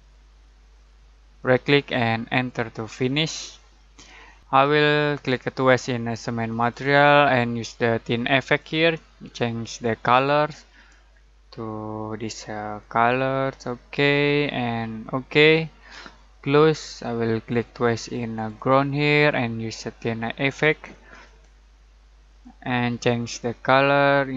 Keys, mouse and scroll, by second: 1.4 alt+right click, 2.3 alt+click, 3.1-3.5 alt+scroll down 1, 3.5-4.4 alt+middle click, 4.4 alt+click, 6.5 alt+click, 12.8-14.0 alt+drag.